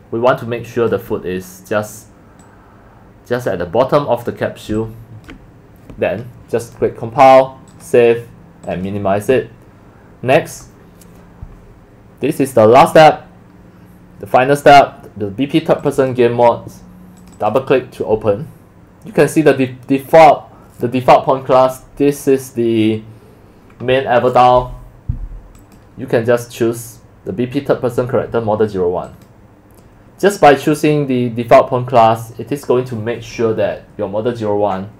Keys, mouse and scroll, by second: 2.4-3.4 drag, 4.8 alt+click, 5.9 click, 6.6 click, 7.7 click, 8.6 click, 15.8 click, 16.0 click, 17.2 click, 17.4 click, 18.5 drag, 25.6 click, 29.1 click.